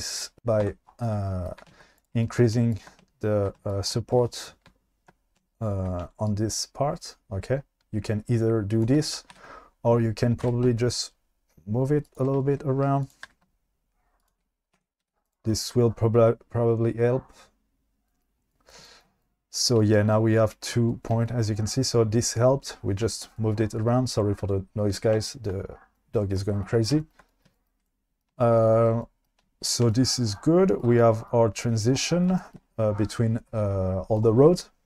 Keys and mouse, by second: 0.4 q, 0.6 Tab, 2.8 shift+click, 3.7 shift+click, 6.4-8.9 shift+drag, 9.3 ctrl+z, 10.4 g, 13.0 click, 13.3 g, 14.8 Tab, 15.0 q, 27.5-27.8 shift+middle drag, 29.4 shift+middle click.